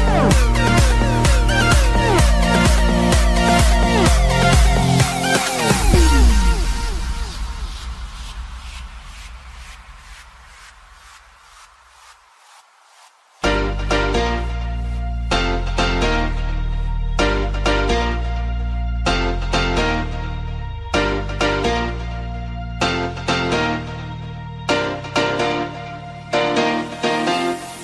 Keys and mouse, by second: 1.1-2.4 typing, 1.3 click, 5.3-6.0 typing, 5.5 click, 7.2 Return, 7.2 click, 7.2 r, 11.8 click, 13.7 click, 16.2 ctrl+r, 16.2 click, 17.2 click, 18.5 click, 20.4 click.